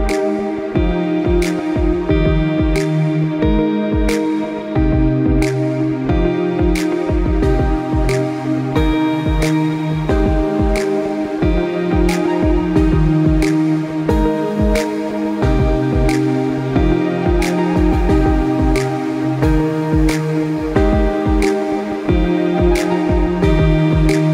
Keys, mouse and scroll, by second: 0.2 scroll down 2, 0.4 middle click, 1.4 s, 2.7 middle click, 3.6 g, 5.1 middle click, 5.8 g, 7.3 g, 8.2 middle click, 9.0-9.8 scroll down 2, 9.2 middle click, 9.8 g, 11.2 middle click, 11.8 g, 13.2 middle click, 13.8-14.2 scroll up 4, 14.2 middle click, 14.6 scroll down 2, 14.9 middle click, 15.5 middle click, 16.4 g, 17.5 middle click, 18.4 s, 19.8 middle click, 20.1 scroll up 3, 20.4 middle click, 21.2 g, 23.2 click.